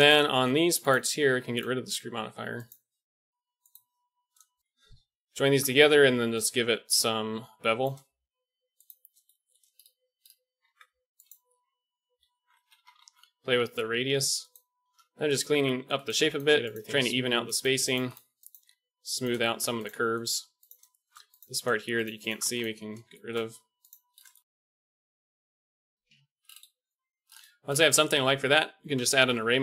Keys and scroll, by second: 5.8 ctrl+j, 8.8 Tab, 9.2-10.9 typing, 11.9 g, 13.0-17.0 typing, 14.6 ctrl+z, 18.3 x, 19.6 g, 20.8-24.8 typing, 25.8 typing, 29.3 KP_1.